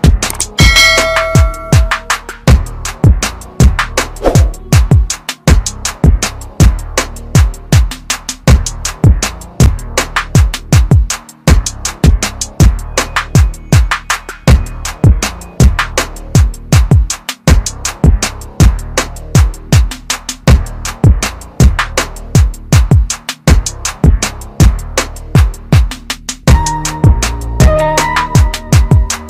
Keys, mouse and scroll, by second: 1.0-2.5 typing, 3.0 click, 9.9-10.2 scroll down 1, 11.5 ctrl+KP_Subtract, 14.4 click, 18.4-20.3 scroll up 1, 21.9 click, 28.4 scroll down 1, 28.9 click.